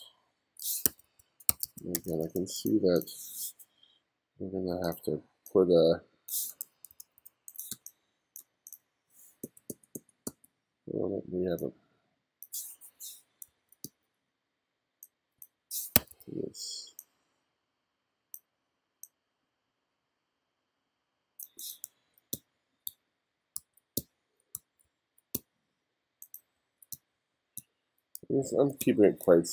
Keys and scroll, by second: 0.9 1, 2.0 2, 7.0 2, 7.8 space, 9.5 b, 13.5 f, 13.9 g, 15.4 b, 16.0 1, 21.9-25.4 typing, 26.6-29.5 typing.